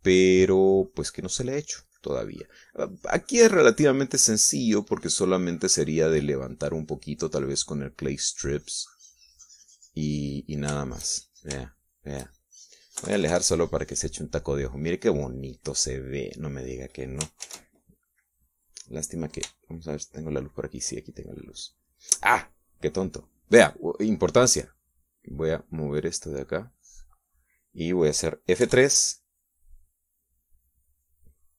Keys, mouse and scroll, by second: 11.3 middle click, 12.2 shift+middle click, 14.4 KP_Subtract, 15.0-16.6 middle drag, 16.7 middle click, 18.8 shift+z, 21.4 shift+click, 26.0 middle click, 26.8-28.8 drag, 30.0 F3.